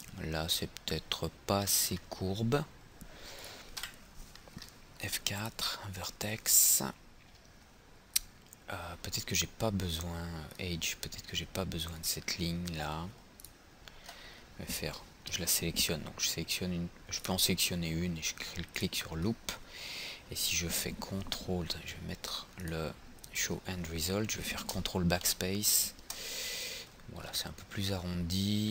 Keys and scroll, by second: 3.9 F4, 25.4 ctrl+BackSpace.